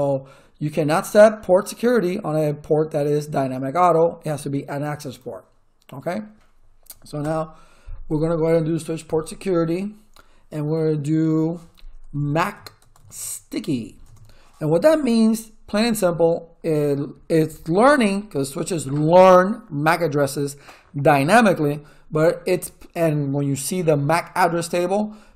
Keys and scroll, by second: 7.2 Return, 9.0 Up, 11.8-13.7 typing, 14.0 Return.